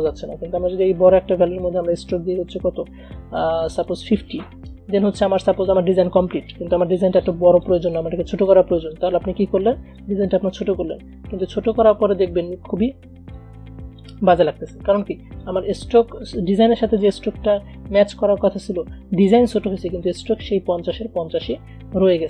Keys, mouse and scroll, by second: 10.1-13.4 shift+drag, 13.4-19.6 shift+drag.